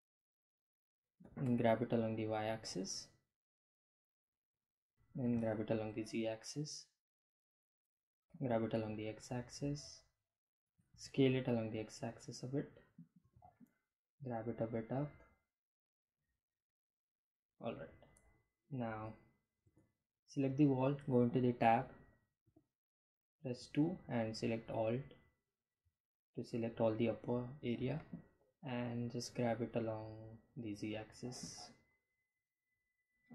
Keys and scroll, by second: 5.0 g, 5.1 z, 7.8 g, 8.9 x, 10.1 s, 10.3 x, 12.5 g, 13.1 z, 18.5 Tab, 21.2 2, 26.1 g, 26.4 z.